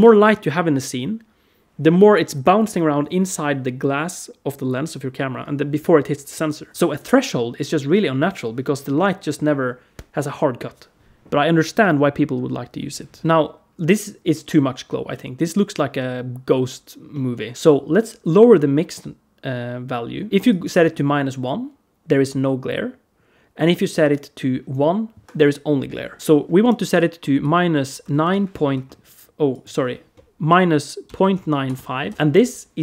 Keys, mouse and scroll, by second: 13.2 click, 13.2 middle click, 13.2-14.3 scroll down 1, 14.9 middle click, 16.9 middle click, 20.2 click, 23.7 click, 32.1 click.